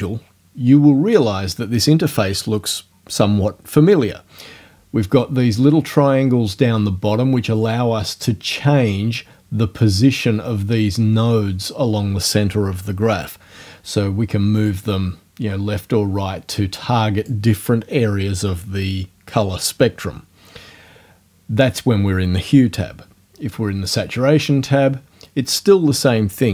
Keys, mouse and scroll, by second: 14.7-17.4 drag, 23.9 click.